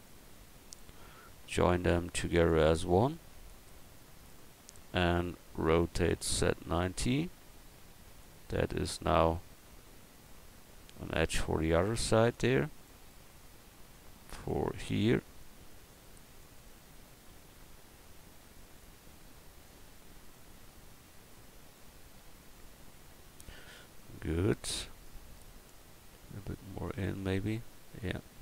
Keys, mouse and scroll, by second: 2.3-4.1 drag, 4.1 click, 5.9 r, 12.3 click, 13.0-15.7 middle drag, 18.8-22.5 drag, 24.1-28.4 middle drag.